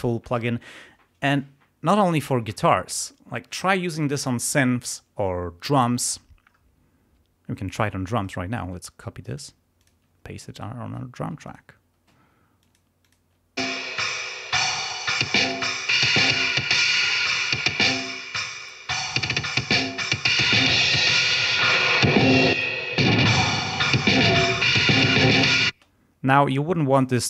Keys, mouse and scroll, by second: 8.1 right click, 9.2 click, 9.7 click, 10.4 right click, 11.4 click, 12.5 click, 12.9 click, 13.5 space, 15.4 click, 16.5 click, 17.7 click, 18.3 click, 20.3-21.3 drag, 21.5 click, 22.5 click, 25.3 click, 25.7 space, 26.8 click.